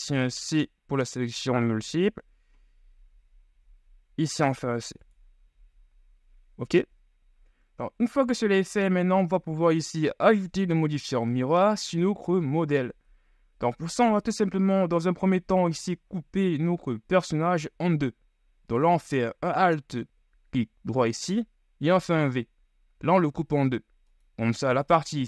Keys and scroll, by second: 0.2 c, 2.0 g, 5.8 z, 22.0 v.